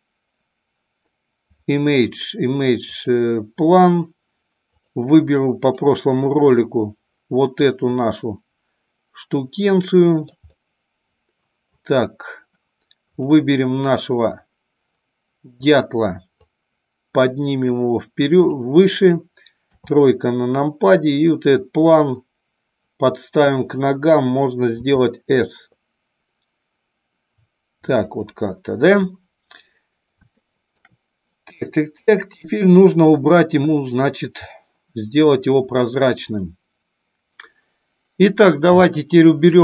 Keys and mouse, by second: 8.6-10.5 drag, 10.6-11.6 middle drag, 13.1 click, 16.4-17.8 drag, 18.4 click, 19.6 KP_3, 21.5-23.5 drag, 25.3 s, 28.1 click, 30.4 shift+middle click.